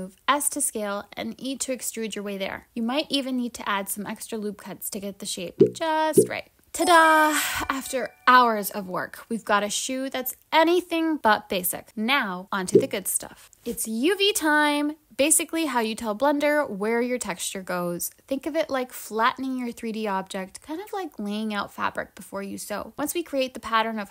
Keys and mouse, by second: 5.2 g, 13.4 click, 14.2 click.